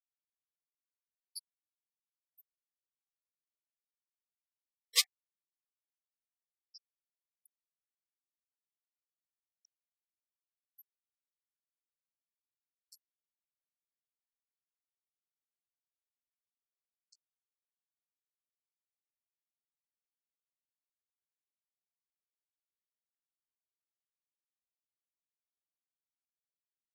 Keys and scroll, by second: 7.8 shift+f, 8.1 shift+y, 9.5 2, 15.2 Return.